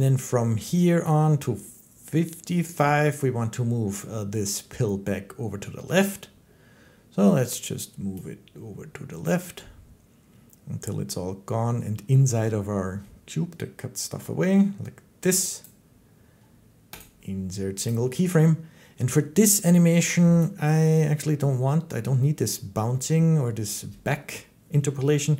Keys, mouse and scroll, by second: 2.6 click, 15.4 click, 16.8 middle click, 17.8 click.